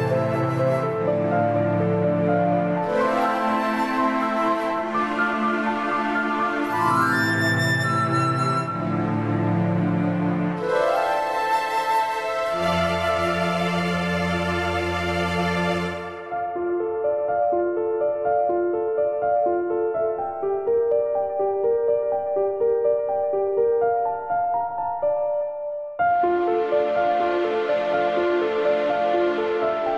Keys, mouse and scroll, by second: 0.2 click, 2.5 click, 3.5 click, 4.6 click, 5.7 click, 6.7 KP_Add, 6.8 KP_Add, 6.9 KP_Add, 7.3 click, 11.4 click, 13.0 click, 13.1 click, 14.5 click, 15.9 a, 16.6 click, 18.8 click, 20.8 click, 21.2 click, 22.1 click, 23.6 s, 24.9 KP_1, 26.1 click, 27.0 click, 28.4 click, 28.9 click, 29.6 click.